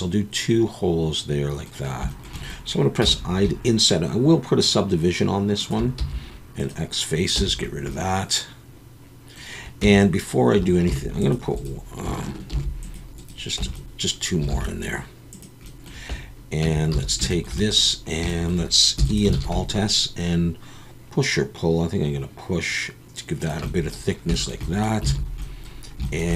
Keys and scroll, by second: 3.0 i, 6.0 x, 7.4 Tab, 9.8 Tab, 10.9 ctrl+r, 12.5 ctrl+r, 13.6 Tab, 14.5 alt+a, 16.9 Tab, 16.9 a, 19.0 e, 19.4 alt+s, 25.1 alt+a.